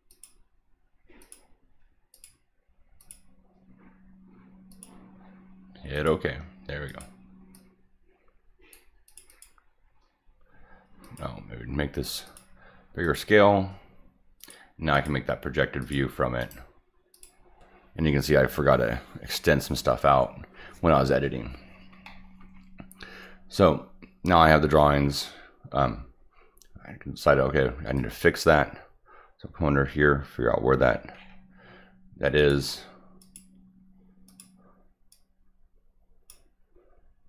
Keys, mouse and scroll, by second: 0.1 click, 1.2 click, 2.1 click, 3.0 click, 4.7 click, 5.9 click, 6.9 click, 7.5-8.7 drag, 9.1 click, 9.3 click, 11.0 click, 12.3 click, 13.0 click, 14.4 click, 14.9 click, 15.8 click, 16.4 right click, 17.1 click, 19.7 middle click, 22.1 middle click, 28.0 click, 30.8 middle drag, 31.2 middle click, 32.4 click, 33.2 click, 34.3 click, 35.1-36.3 drag.